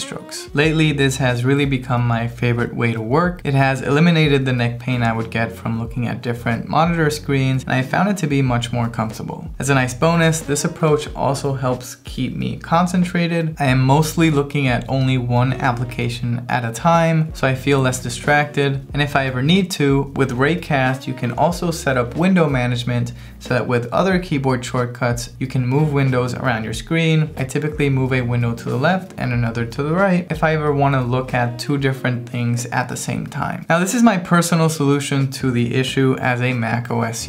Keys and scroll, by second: 0.6 ctrl+alt+shift+super+t, 24.9 alt+h, 25.6 ctrl+alt+shift+super+t, 26.0 alt+l, 29.0 alt+h, 29.7 ctrl+alt+shift+super+b, 30.3 alt+l.